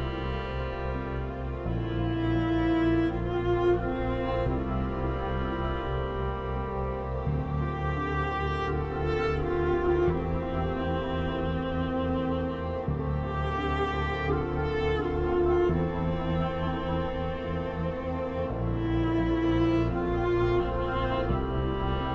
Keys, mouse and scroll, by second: 0.1-11.3 drag, 11.3 F3, 12.4-14.1 drag, 14.1 F3, 14.9 F4, 15.9 click, 16.4 F2, 16.7-20.7 drag, 22.0 click.